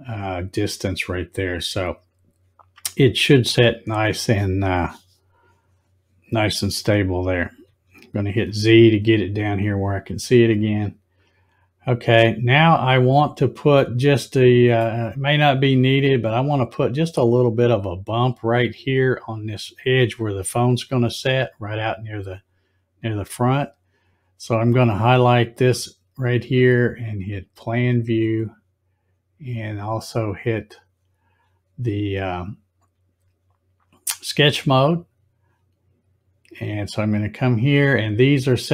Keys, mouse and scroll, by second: 1.6-2.2 scroll down 2, 2.7-3.1 scroll up 1, 3.1-3.6 scroll down 1, 7.7 z, 10.4 click, 12.5-13.4 scroll up 1, 13.7-14.7 middle drag, 25.5 click, 27.3 click, 30.3 click, 34.8 scroll up 1.